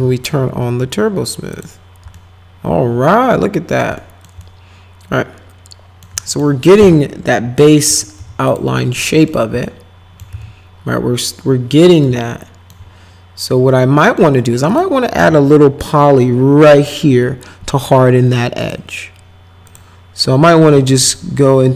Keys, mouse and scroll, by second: 1.5 click, 2.1-3.8 alt+middle drag, 4.0 middle click, 4.4-6.0 alt+middle drag, 6.2 middle click, 6.8 F4, 7.4 F4, 7.8 F4, 8.2 F4, 8.5 click, 9.1 middle click, 9.6 alt+middle click, 10.3 z, 12.0 alt+middle click, 13.9 middle click, 14.7 click, 15.2 F4, 18.6 click, 19.7 click, 21.0 click.